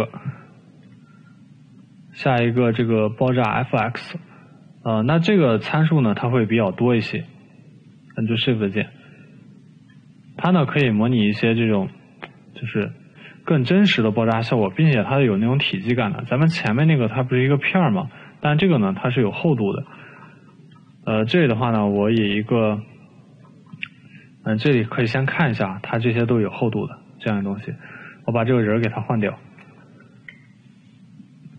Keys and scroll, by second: 0.8 Delete, 11.6 t, 15.7 e, 31.4 Delete.